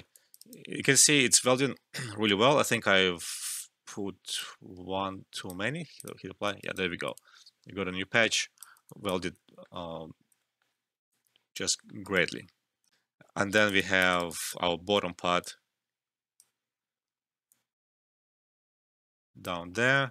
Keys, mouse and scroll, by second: 0.1 alt+click, 0.3 alt+right click, 2.7 ctrl+z, 4.3-5.9 drag, 6.6 alt+right click, 7.1-8.8 alt+drag, 9.4 alt+middle click, 10.3 alt+middle click, 11.0 alt+click, 11.7 alt+middle click, 12.0 alt+right click, 12.9 alt+F12, 13.5 alt+right click, 13.7 alt+click, 14.1 alt+right click, 14.2-20.1 alt+drag.